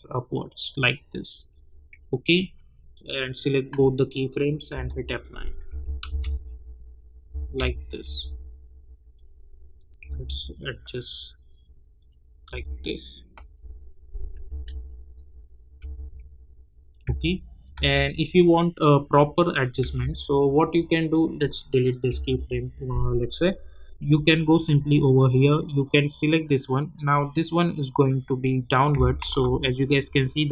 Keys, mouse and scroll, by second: 4.7 F9, 5.6 j, 6.0 space, 8.0 k, 9.1 click, 10.0 Up, 11.9 click, 12.5 Up, 14.4 j, 15.5-17.7 typing, 20.0 typing, 21.1-29.2 drag, 29.2 ctrl+z, 29.9-30.5 drag.